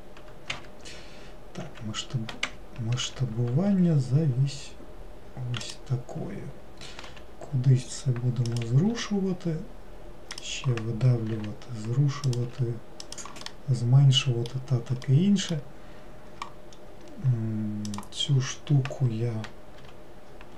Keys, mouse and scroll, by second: 13.5-16.8 middle drag, 16.8-18.0 scroll up 3, 18.0 click, 18.4-19.9 scroll down 1, 19.9 g.